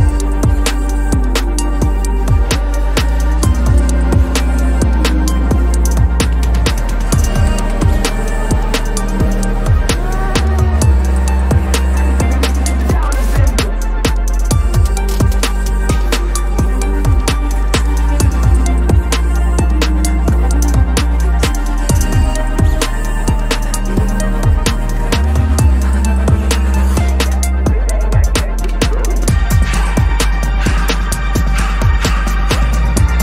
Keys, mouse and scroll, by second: 2.2 ctrl+-, 2.5 ctrl+-, 2.7 ctrl+-, 3.3 ctrl+-, 5.5 ctrl+=, 5.7 ctrl+=, 5.9 ctrl+=, 6.2 ctrl+=, 6.6 space, 7.6 ctrl+=, 8.1 ctrl+=, 10.6 [, 11.0 double click, 11.3 space, 13.8 space, 14.6 alt+click, 15.5 space, 16.1 ctrl+z, 16.5 alt+click, 17.2 right click, 17.7 Return, 18.2 ctrl+-, 18.4 ctrl+-, 23.7 double click, 31.3 double click.